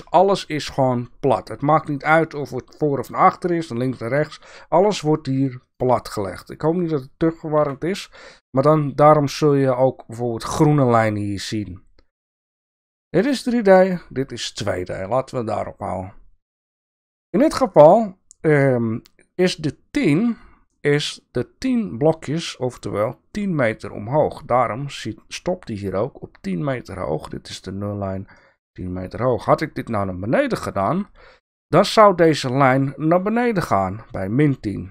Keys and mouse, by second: 2.3 click, 3.1 click, 5.7 click, 6.3 click, 7.5 KP_1.